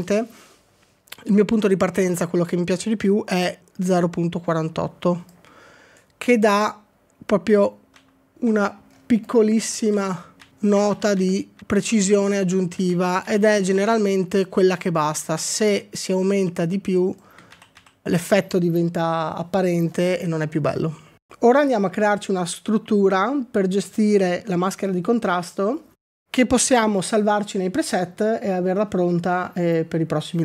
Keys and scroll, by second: 7.9 ctrl+d, 8.4 ctrl+d, 9.9 ctrl+d, 10.5 ctrl+d, 10.9 ctrl+d, 11.3 ctrl+d, 11.6 ctrl+d, 13.2 ctrl+d, 13.6 ctrl+d, 17.6 ctrl+d, 17.8 ctrl+d.